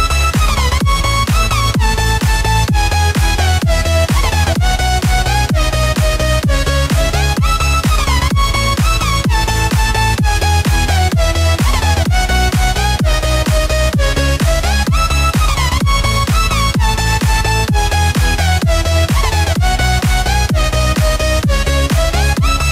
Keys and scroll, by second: 12.6 ctrl+t, 17.7 Return, 20.9 ctrl+t.